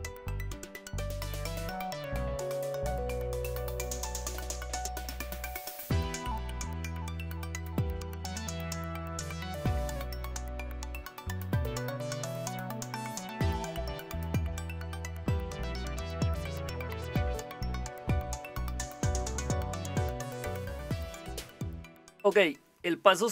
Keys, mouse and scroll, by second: 0.3 click, 2.8 click, 6.2-8.6 typing, 10.1 Return, 22.5 click.